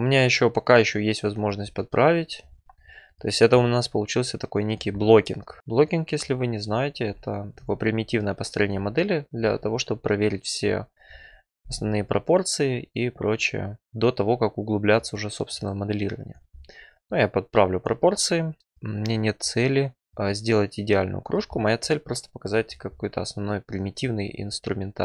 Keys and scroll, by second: 11.6 f, 13.4 1, 13.8 1, 15.4 1.